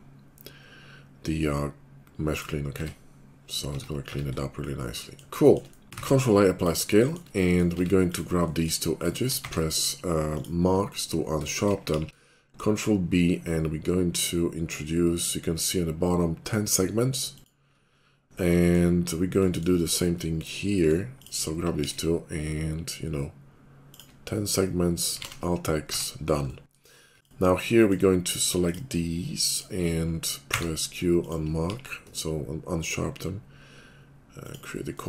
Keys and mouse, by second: 1.7-5.3 middle drag, 2.8 Tab, 3.7 Tab, 4.0 Tab, 5.6 middle click, 5.9 ctrl+a, 6.0 ctrl+a, 6.0 middle click, 7.2 middle click, 7.7 Tab, 8.0 click, 8.1 middle click, 8.9 shift+click, 9.0-12.2 shift+middle drag, 9.4 q, 11.9 ctrl+b, 17.6 middle click, 18.8 middle click, 19.7-21.0 middle drag, 21.4 middle click, 21.8 ctrl+b, 25.2 alt+x, 25.9 Tab, 27.2-28.2 drag, 28.2-31.7 middle drag, 30.5 q, 31.7 ctrl+b, 31.7 ctrl+click, 32.1-34.6 shift+middle drag, 34.7 middle click.